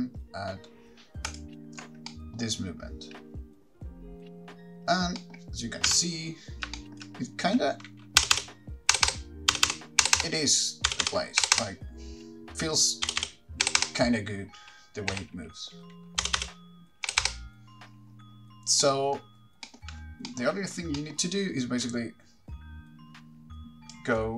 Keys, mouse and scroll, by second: 1.6 ctrl+click, 2.3 middle click, 5.4 middle click, 6.1 KP_3, 6.7 scroll up 3, 7.0 shift+middle click, 8.4 Left, 8.6 Left, 9.1 Right, 9.3 Right, 9.7 Left, 9.9 Left, 10.2 Right, 10.4 Right, 11.1 Left, 11.3 Left, 11.6 Right, 11.8 Right, 12.5 Right, 12.5 Left, 12.5 shift+middle click, 12.5 scroll up 3, 13.3 Left, 13.4 Left, 13.9 Right, 14.1 Right, 15.3 Right, 16.4 Left, 16.6 Left, 17.3 Right, 17.4 Right, 18.1-18.8 scroll down 10, 19.0 middle click, 19.6 scroll down 2, 19.9 middle click, 20.5 middle click, 22.0 middle click, 22.0 click, 22.0 scroll up 8.